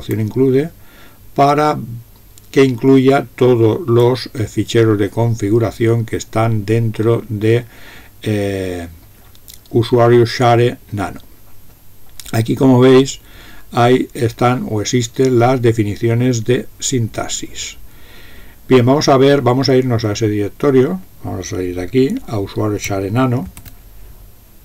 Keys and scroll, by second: 23.5 ctrl+x.